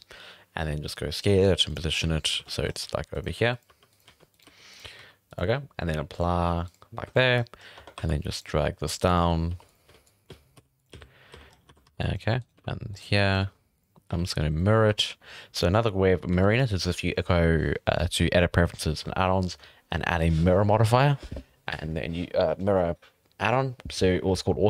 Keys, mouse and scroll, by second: 0.8-4.9 typing, 1.9 scroll up 4, 2.5 shift+middle drag, 2.6 scroll up 5, 6.1-7.1 drag, 7.1 shift+middle drag, 7.3 scroll up 4, 7.6 scroll down 3, 7.7 Tab, 7.9-14.1 typing, 8.0-8.4 drag, 10.0 click, 11.5 scroll up 4, 11.7 alt+a, 12.0-12.4 drag, 12.4 right click, 13.2 click, 14.3 scroll down 5, 14.8 Tab, 15.0 Tab, 16.3 n.